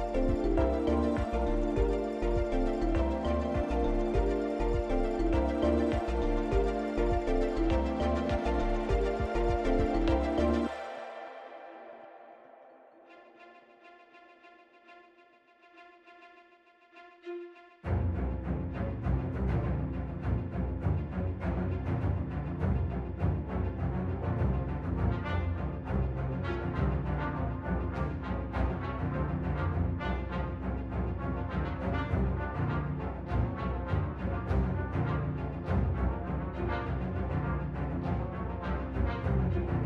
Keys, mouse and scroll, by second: 1.3 click, 3.9 Delete, 5.1 click, 6.6 shift+d, 21.4-22.1 scroll down 2, 22.1 middle click, 22.1-22.9 scroll down 3, 22.9-23.5 scroll up 3, 23.5 middle click, 24.7 Tab, 25.8 click, 26.7 click, 27.0-27.6 scroll up 2, 28.7 l, 30.8 click, 31.8 click, 32.4 Tab, 32.7-33.0 scroll down 2, 33.0 middle click, 34.3-34.8 scroll down 2, 35.4 shift+middle click, 35.4-36.0 scroll down 4, 36.2 middle click, 37.1 scroll down 2, 37.4 shift+middle click, 38.1 click, 39.4 Delete.